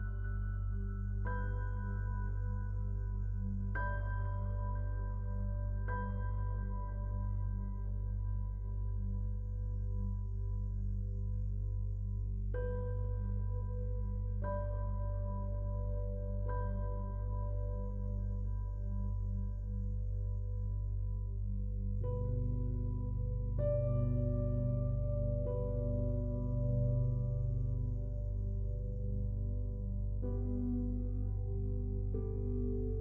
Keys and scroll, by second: 0.8 ctrl+j, 1.3 ctrl+t, 8.7 ctrl+t.